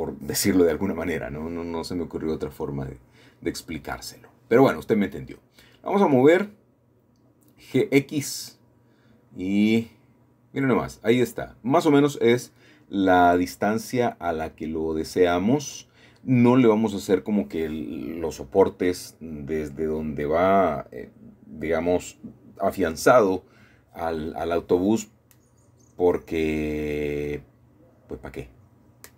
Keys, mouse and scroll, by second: 0.2-1.0 scroll down 1, 0.7-3.1 middle drag, 3.1 g, 3.8 x, 8.0-9.4 shift+drag, 9.4-11.7 middle drag, 9.4-10.0 scroll down 1, 12.4-15.1 scroll down 1, 15.3-19.0 middle drag, 19.9-21.3 scroll down 4, 19.9 middle click, 20.3 middle click, 21.9-22.4 scroll up 2, 22.4 right click, 23.0 click, 23.8-24.5 scroll down 1, 24.2 shift+middle click, 25.1-26.4 scroll up 1, 28.4 click.